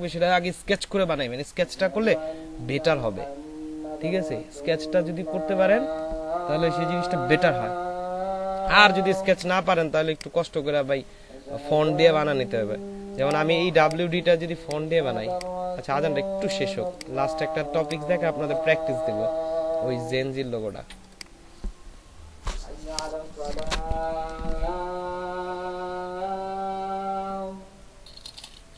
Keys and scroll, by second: 14.5 space.